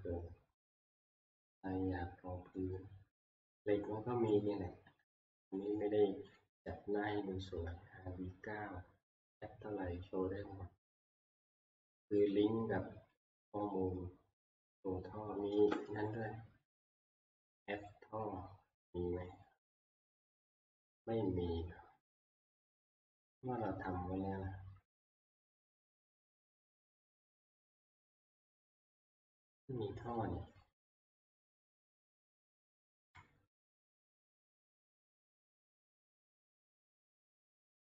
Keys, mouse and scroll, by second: 0.0 click, 0.1-0.7 scroll, 2.5-3.0 scroll, 3.6-4.0 scroll, 5.0 click, 5.7 click, 6.4 click, 6.6 scroll, 8.1-8.6 scroll, 12.0 middle click, 12.0 click, 12.3 click, 13.2 click, 13.7 middle click, 13.7 middle click, 16.1 click, 16.3 click, 17.9 click, 19.4 click, 20.3 middle click, 20.3 middle click, 20.4 middle click, 20.8 middle click, 20.9 middle click, 21.2 scroll, 21.8-22.5 scroll, 22.5-22.8 scroll, 23.2-24.1 scroll, 24.1-25.4 scroll, 26.1-27.0 scroll, 27.8 click, 30.2 click, 30.6 click, 31.5 alt+Tab, 33.1 middle click, 33.7 shift+middle click, 34.0 middle click, 34.1 middle click, 34.2-35.4 scroll, 36.0 scroll, 36.3 click, 36.5 click, 36.9 click.